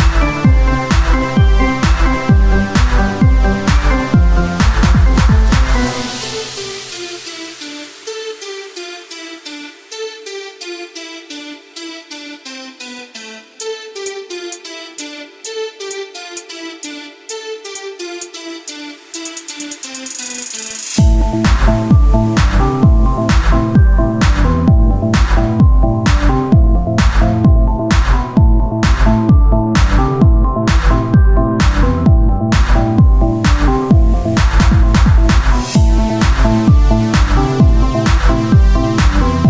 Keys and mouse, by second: 2.0-3.7 drag, 2.0 right click, 2.7 z, 3.7 Tab, 4.4 Tab, 4.4-7.5 drag, 5.3 Tab, 8.0 Tab, 8.2 click, 9.1 z, 10.2-12.9 drag, 12.3 z, 13.9-15.1 right drag, 15.1 o, 15.6 s, 17.5 click, 20.2-22.1 drag, 20.2-21.7 right drag, 22.5-25.3 drag, 25.2 Tab, 26.9 Tab, 26.9-28.6 drag, 27.4-28.4 right drag, 29.1 Tab, 30.4 Tab, 31.3-32.4 drag, 31.3-32.9 right drag, 32.9 click, 33.5 Tab, 36.2 KP_1, 37.5 Tab, 38.0 click, 39.3 s.